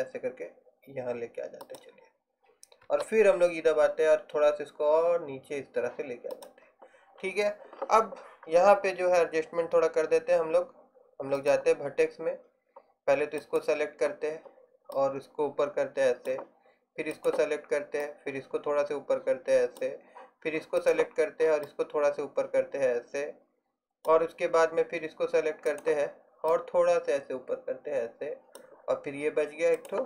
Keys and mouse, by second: 2.9 e, 8.5-11.5 middle drag, 13.5-15.0 right drag, 15.0 middle click, 15.6-17.2 drag, 17.2-18.9 right drag, 18.1-19.8 drag, 20.9-21.9 right drag, 21.7 click, 22.5-23.7 middle drag, 25.8 right click, 26.6-27.8 middle drag, 27.8 click, 29.9-30.0 drag.